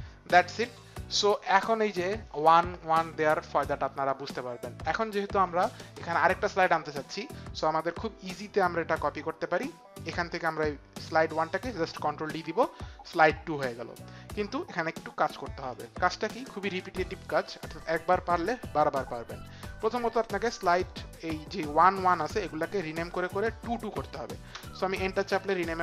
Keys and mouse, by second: 2.3 KP_1, 10.0 click, 12.3 ctrl+d, 16.6 click, 22.6 click, 24.4 Return, 25.4 Right.